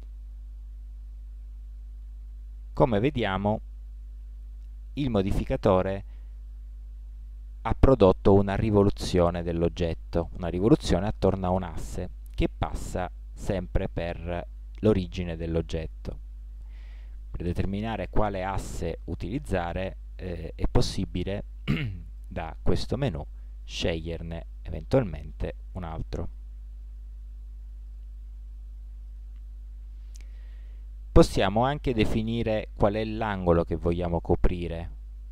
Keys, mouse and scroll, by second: 0.7-8.2 middle drag, 11.7-13.5 middle drag, 17.1 middle click, 22.1-23.6 drag, 23.6 middle click, 27.8-29.8 middle drag, 33.3-35.2 middle drag.